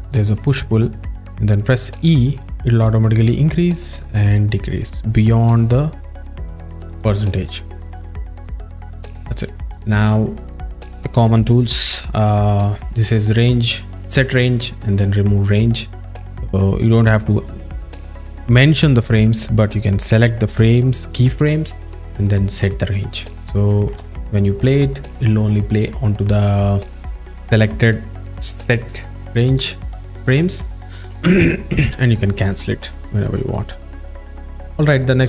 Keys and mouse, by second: 1.2 click, 2.3 e, 7.6 right click, 15.8 drag, 16.1 drag, 17.5 click, 18.0-19.7 drag, 22.7 click, 24.0 space, 31.1 space, 32.5 click, 33.6 click.